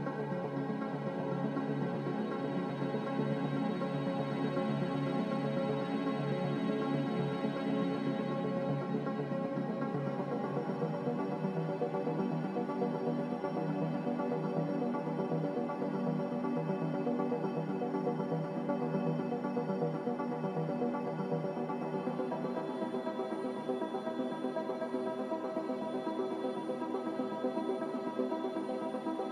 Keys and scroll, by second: 0.0-0.5 typing, 14.3-15.3 typing, 20.0 s.